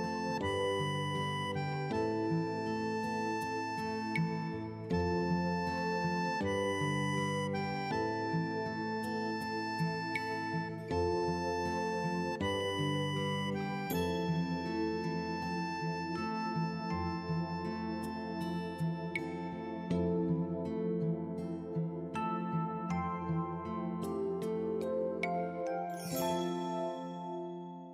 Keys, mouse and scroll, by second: 4.1 t, 5.7-7.6 scroll down 1, 7.6 click, 11.3 middle click, 15.8 click, 22.1 right click, 23.4 click, 25.1 t, 26.2 scroll down 1.